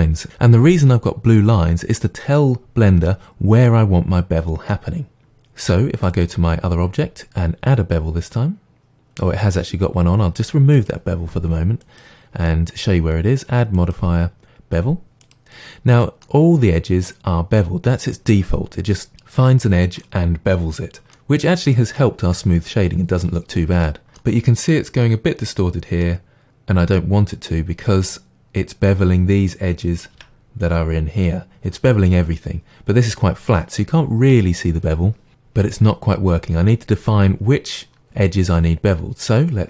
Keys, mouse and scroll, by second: 2.9-3.6 middle drag, 5.1-6.1 middle drag, 5.6 Tab, 6.1 click, 10.8 click, 11.8-16.3 drag, 16.3-21.5 middle drag, 22.0-39.6 middle drag, 30.1 Tab.